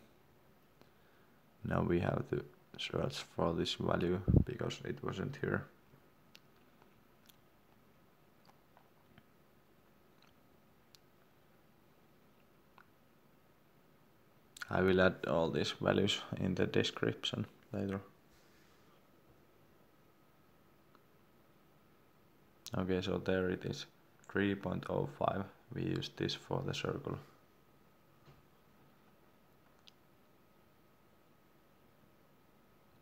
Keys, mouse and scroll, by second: 16.3-16.8 scroll up 1, 19.6-20.6 scroll down 1, 27.1-27.5 scroll up 1, 29.2 click, 31.2 3.